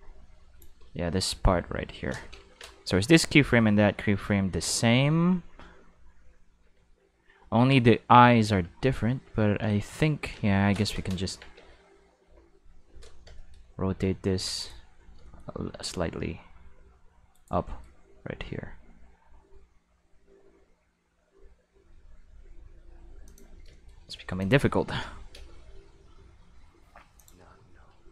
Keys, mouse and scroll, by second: 1.0 middle click, 1.3 middle click, 11.3 Tab, 11.5 a, 12.2 q, 13.4 shift+middle click, 13.9 r, 14.6 right click, 15.0 middle click, 15.4 middle click, 15.7 r, 17.3 right click, 18.0 r, 23.2 click, 24.4 click, 24.8 q, 25.3 space, 27.2 click, 28.0 middle click.